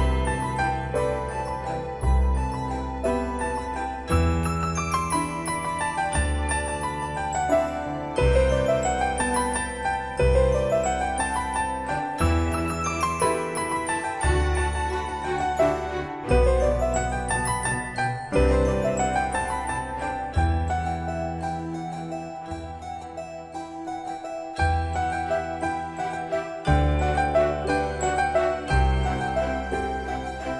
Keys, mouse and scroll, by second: 23.3-23.9 scroll up 1, 25.2-25.6 scroll down 1, 26.8 click, 28.0-28.9 scroll down 1.